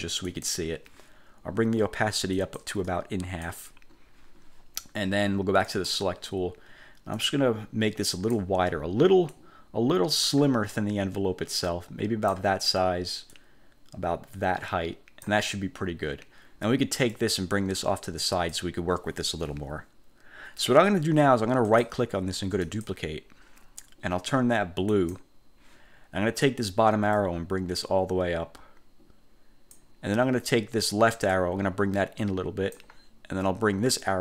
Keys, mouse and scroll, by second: 0.4 click, 2.5 click, 5.8 click, 7.3-8.6 drag, 9.4 click, 11.6 click, 13.4-15.6 drag, 17.2-18.8 drag, 21.8 click, 22.8 click, 25.0 click, 27.2-30.0 drag, 31.4-33.0 drag, 34.0-34.2 drag.